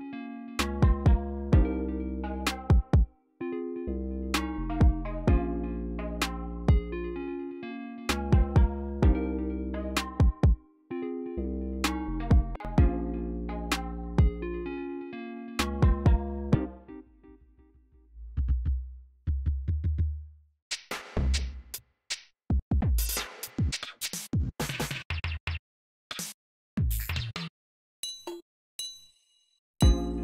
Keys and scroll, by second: 0.3 alt+super+s, 1.4 y, 1.7 y, 14.1 super+k, 14.5-30.2 typing.